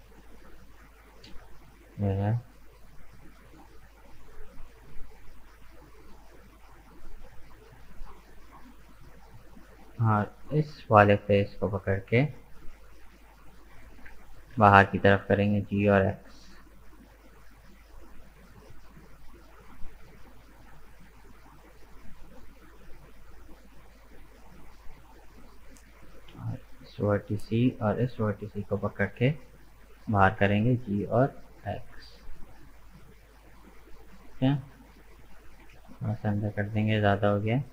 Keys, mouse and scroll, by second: 0.2-1.5 middle drag, 1.5 Tab, 1.7 right click, 2.1 middle click, 2.8 right click, 3.1 Tab, 3.4-6.5 middle drag, 8.3 click, 9.2-10.2 middle drag, 10.2 right click, 10.8 shift+right click, 11.3-14.1 middle drag, 14.1 g, 17.8-23.5 middle drag, 25.8-27.0 drag, 27.0 right click, 27.9 shift+right click, 28.3-30.0 middle drag, 30.0 g, 32.6 scroll down 2, 32.9-35.2 middle drag, 35.2 g.